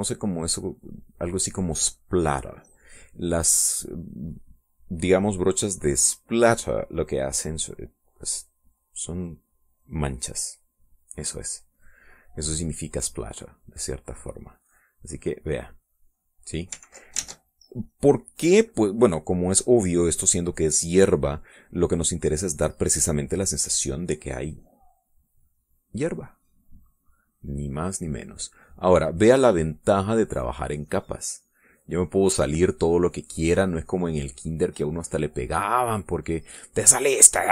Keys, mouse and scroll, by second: 12.2 click, 13.6 click, 15.2-16.8 drag, 17.6 ctrl+z, 18.4 middle click, 20.4 middle click, 24.6-35.4 drag, 35.5 middle click, 36.0 click, 36.7 middle click, 37.2-37.5 drag.